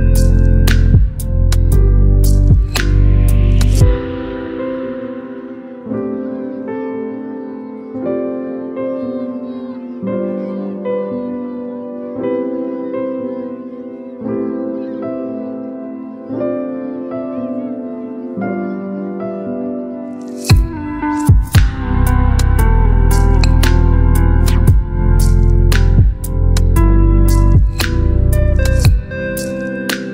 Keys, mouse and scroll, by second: 4.0 ctrl+t, 5.6-7.3 drag, 8.0 Return, 8.8-15.1 drag, 16.2 ctrl+t, 17.4-19.2 drag, 24.6 ctrl+0.